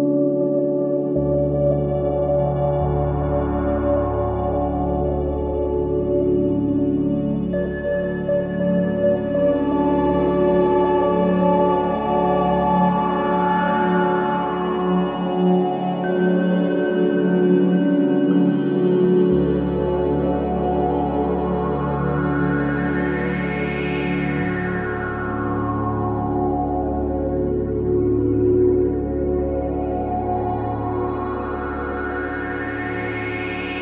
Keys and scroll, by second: 3.3 space, 5.8 F3, 6.2 Escape, 13.8 F2, 17.6 F2, 21.1 F3, 31.8 ctrl+z, 32.7 Escape.